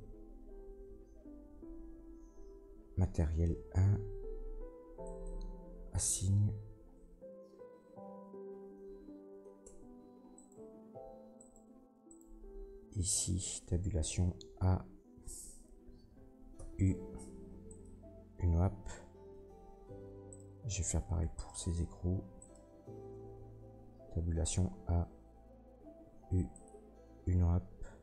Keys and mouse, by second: 9.6 Tab, 10.3 middle click, 10.3 right click, 11.3 middle click, 12.1 middle click, 13.4 Tab, 13.9 a, 16.5 u, 19.4 click, 20.3 middle click, 20.4 click, 21.0 Tab, 21.3 middle click, 21.4 click, 22.4 middle click, 22.5-26.6 drag, 23.7 Tab, 24.2 a, 26.0 u.